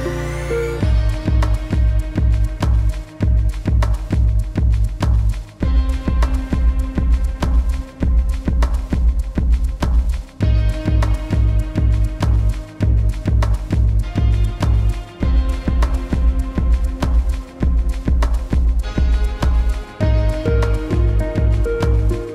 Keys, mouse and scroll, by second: 0.0 ctrl+shift+s, 3.1 click, 7.5-12.1 typing, 16.3 click, 18.2 ctrl+shift+s, 19.9 Tab, 21.2 click.